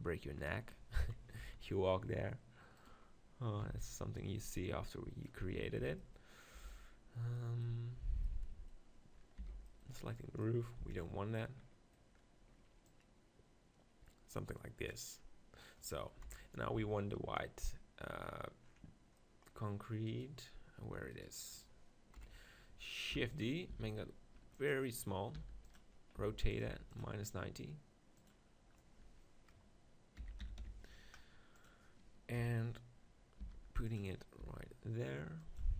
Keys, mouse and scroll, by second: 1.0 KP_7, 1.4 z, 1.8 middle click, 2.8-8.2 drag, 3.6 b, 5.8 b, 6.5 b, 8.2 middle click, 9.4 b, 10.8 z, 12.9-14.9 drag, 16.3 KP_7, 16.7 z, 20.2-22.1 right drag, 22.1 KP_1, 23.1 shift+d, 23.4-24.9 drag, 23.7 s, 25.5 r, 25.8-30.1 drag, 26.2 g, 26.7 r, 32.4 KP_7, 33.4 g, 34.1 middle click, 34.4 g, 35.6-35.7 drag.